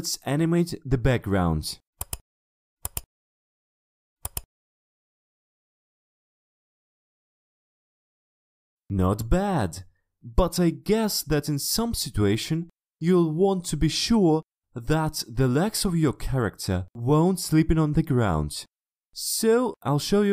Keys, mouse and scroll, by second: 0.2-1.7 drag, 2.1 right click, 2.8 click, 4.3 click, 5.8 shift+click, 7.3 click, 7.6 click.